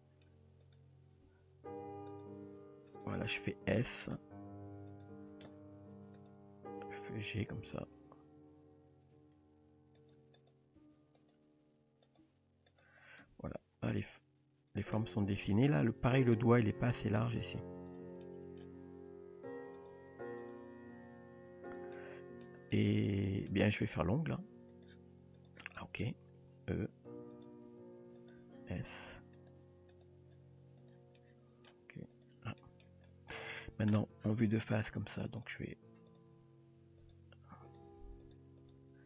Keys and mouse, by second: 1.3 s, 2.4 g, 5.0 click, 6.2 click, 6.8 g, 10.4 click, 10.8 g, 11.4 r, 12.2 g, 13.2 Tab, 14.0-15.0 middle drag, 16.1 Tab, 16.3-17.2 middle drag, 18.2-18.6 middle drag, 18.8 g, 20.5 click, 20.9 g, 21.9-22.4 middle drag, 22.7-23.5 middle drag, 24.8 click, 25.8 middle drag, 26.4 r, 27.8 e, 28.5 s, 29.6 g, 30.8 click, 31.2 middle click, 32.6 middle drag, 33.3 shift+middle drag, 35.4 click, 36.7 r, 37.3 g, 37.9 r.